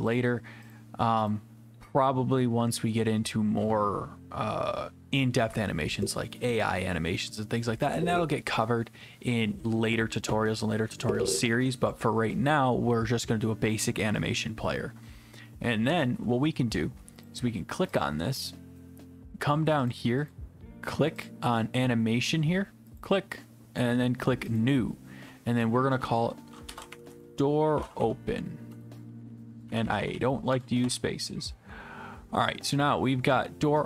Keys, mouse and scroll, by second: 0.2 click, 0.7 click, 1.3 click, 17.3 click, 18.0 click, 18.5 click, 19.9 click, 20.3 click, 21.3 click, 23.0 click, 24.6 click, 26.4-30.5 typing, 29.7 Left, 29.8 Left, 30.0 Left, 30.1 Left.